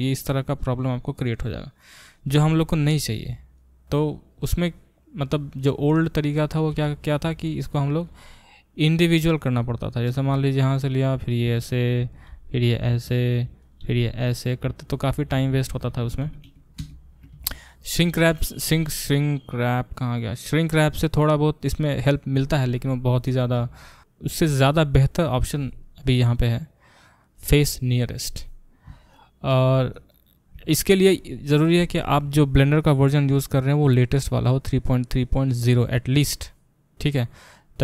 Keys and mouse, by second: 2.7 ctrl+z, 6.3 click, 6.4-8.0 middle drag, 8.0 click, 8.1 middle click, 8.9-9.9 drag, 9.9-12.1 shift+middle drag, 10.6 e, 12.1 click, 12.2-13.6 middle drag, 12.3 f, 13.6 click, 13.7-18.4 middle drag, 13.8 f, 15.5 ctrl+z, 15.7 ctrl+z, 16.0 ctrl+z, 16.8 ctrl+z, 18.4-23.3 drag, 23.3-26.4 ctrl+alt+middle drag, 26.4-36.1 drag, 36.1-37.8 middle drag.